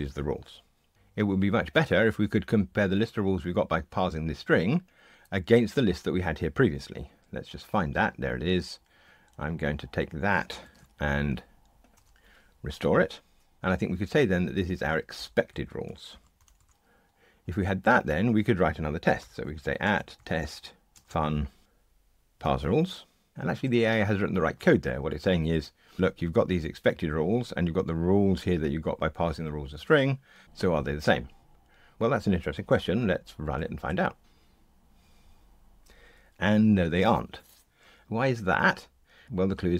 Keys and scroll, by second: 11.2 super+c, 12.0 super+v, 13.6 Escape, 16.7 Escape, 33.5 ctrl+r.